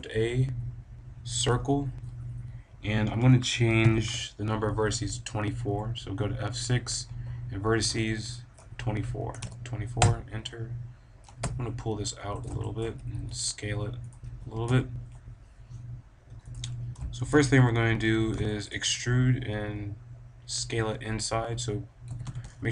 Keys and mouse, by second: 3.8 F6, 11.2 g, 12.4-15.8 drag, 13.2 s, 14.5 g, 16.5-20.0 drag, 22.0-22.7 middle drag, 22.0 a, 22.1 b.